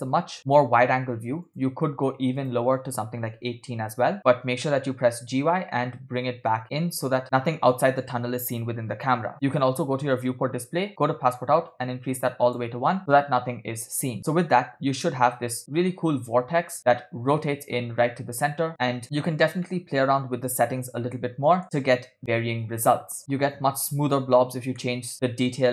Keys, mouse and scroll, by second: 1.5 click, 2.4-4.3 drag, 4.4 g, 8.3-8.7 scroll down 2, 10.3 click, 10.5 scroll down 2, 11.8 click, 13.3 scroll up 1, 13.8 scroll down 1, 14.3 space, 19.0 click, 19.0 space, 19.7-21.6 middle drag, 21.6 space, 24.8 middle click.